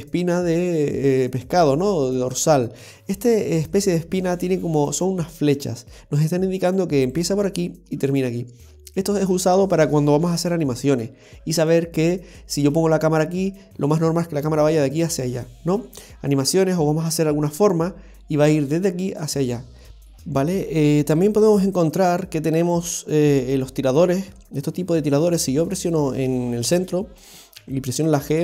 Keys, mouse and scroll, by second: 7.1 right click, 8.1 right click, 20.0 shift+middle click, 20.0 scroll down 1, 21.4 shift+middle click, 22.0 shift+scroll up 1, 23.4 right click, 25.8 right click, 27.5 g.